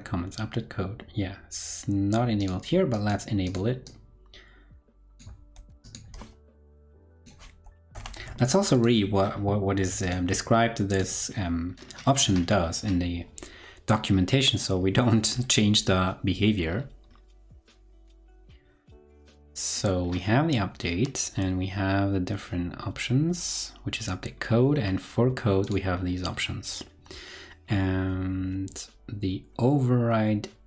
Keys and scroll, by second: 5.5 super+c, 8.0 super+v.